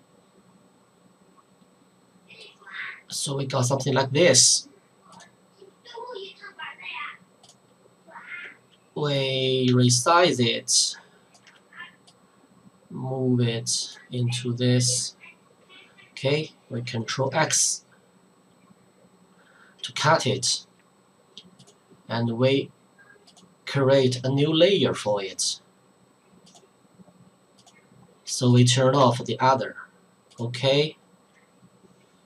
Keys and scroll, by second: 17.3 ctrl+x, 24.9 Return, 29.0 ctrl+v.